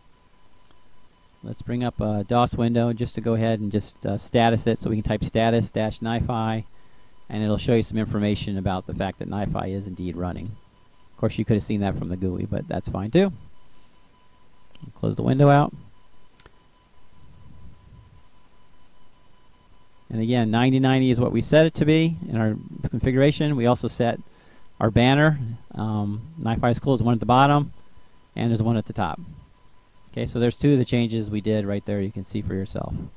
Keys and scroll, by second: 1.4-2.4 typing, 3.7-5.0 typing, 5.4 Tab, 6.3 Return.